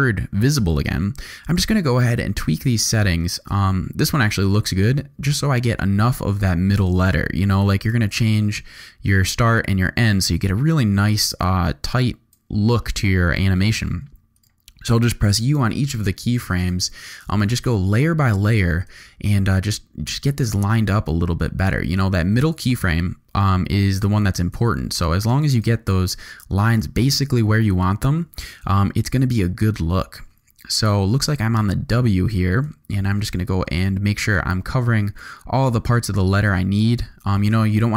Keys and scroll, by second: 15.2 u, 16.9 u, 28.9 u.